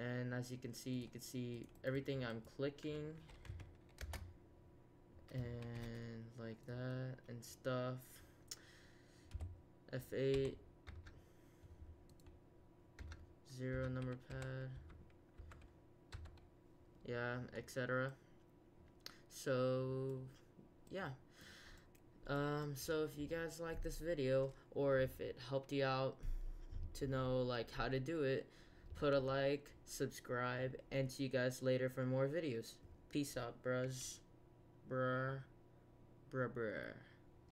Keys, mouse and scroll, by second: 0.9-1.4 drag, 1.5 drag, 3.5 a, 4.0 Return, 5.6 shift+a, 9.3 F8, 12.0 click, 13.0-16.1 typing, 20.3 middle click, 20.8-21.8 middle drag, 22.2-23.0 middle drag, 23.0 click, 24.3 middle click, 37.5 ctrl+F1.